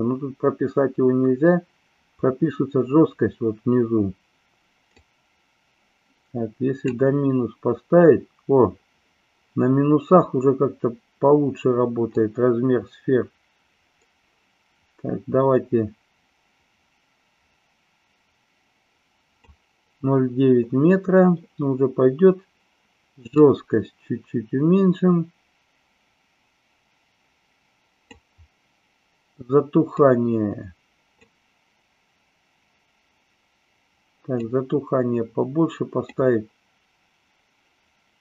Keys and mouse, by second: 4.9-6.8 drag, 12.0-19.4 drag, 23.3-28.0 drag, 29.9-31.2 drag, 34.4-36.0 drag.